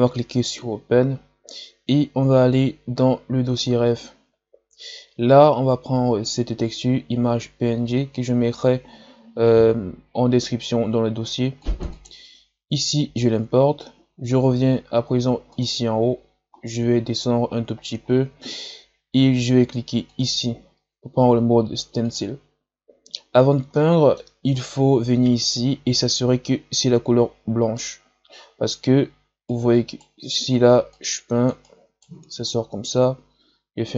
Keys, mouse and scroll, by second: 17.6-19.2 scroll down 10, 19.2-22.1 scroll down 1, 22.1-23.7 scroll down 1, 23.7-29.4 middle drag, 29.4 right click, 30.0-30.9 scroll up 2, 30.9 click, 31.6-33.3 right drag, 33.3 ctrl+z.